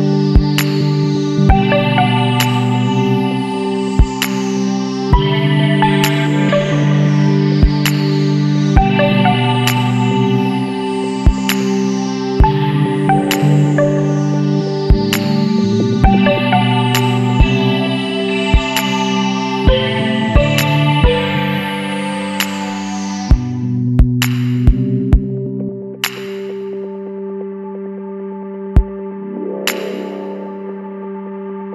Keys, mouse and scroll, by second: 0.7 click, 1.7 KP_8, 2.3 KP_Enter, 4.0 scroll up 2, 4.7 scroll up 1, 6.4-7.5 drag, 8.9-9.5 scroll up 2, 11.0 click, 13.1 click, 14.7 click, 16.4 click, 18.6 click, 19.4 click, 21.8 click, 22.2 Escape, 24.3 click, 25.7 click, 26.5 scroll down 1, 27.6 click, 28.7 KP_9, 30.0 KP_Enter, 31.5-31.7 drag.